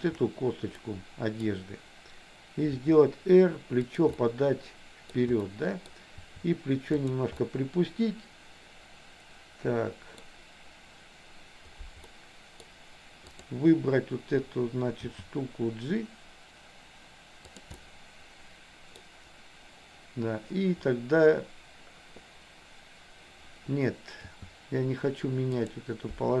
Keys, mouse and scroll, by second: 0.0 shift+click, 1.0 middle click, 2.8 r, 4.2-5.3 middle drag, 5.6 middle click, 6.2 r, 7.5-10.3 middle drag, 12.2 middle click, 13.4 click, 15.1 g, 17.8-19.1 middle drag, 24.5 g.